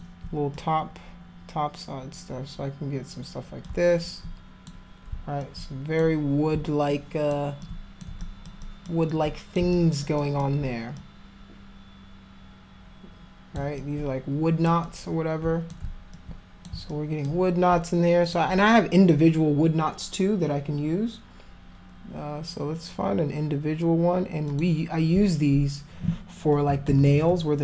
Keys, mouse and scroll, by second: 0.6-3.7 drag, 4.1 alt+click, 5.4 alt+click, 6.9 alt+click, 7.6 alt+click, 8.2 alt+click, 8.7 alt+click, 9.1 alt+click, 9.7 alt+click, 10.2 alt+click, 11.0-13.6 drag, 13.8 alt+click, 14.9 click, 16.2 alt+click, 16.9 alt+click, 18.3 click, 24.5 click, 26.7 [, 27.0 [, 27.1 [, 27.3 [.